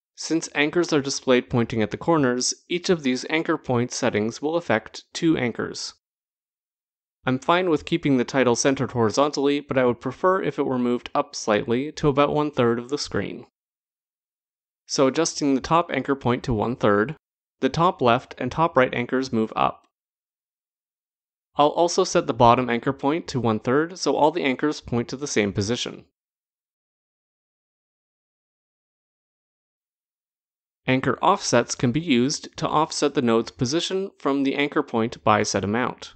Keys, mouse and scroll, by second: 14.5 click, 15.7-17.0 typing, 17.5 Return, 24.5 click, 25.3-26.4 typing, 26.8 Return, 32.1 click, 32.9 click.